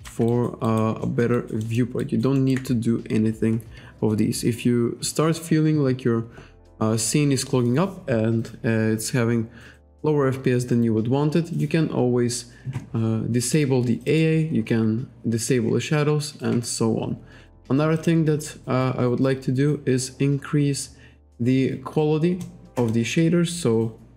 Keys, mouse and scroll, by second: 0.3 alt+right click, 0.7 alt+right click, 1.0 alt+middle click, 2.0 alt+right click, 13.4 click, 14.1 click, 14.5-15.3 scroll up 1, 15.8-16.1 scroll down 1, 18.0 click, 22.8 click.